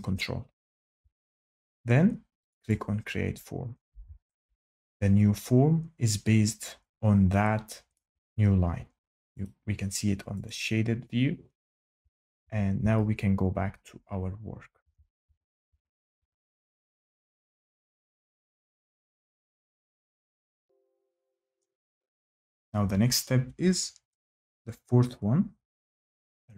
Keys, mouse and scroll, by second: 2.6 click, 7.9 shift+middle click, 9.4 click, 10.4 click, 14.7 ctrl+z, 15.2 ctrl+z, 15.6 ctrl+z, 16.1 ctrl+z, 16.7 shift+right click, 19.4 click, 21.5 click, 25.9 click.